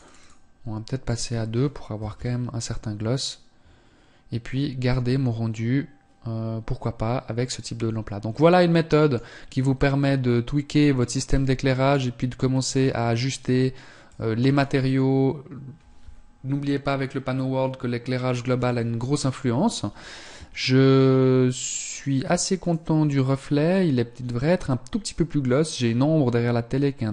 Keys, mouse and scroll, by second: 0.5 click, 7.9 middle click, 9.3 middle click, 11.3-11.9 scroll down 2, 13.3 click.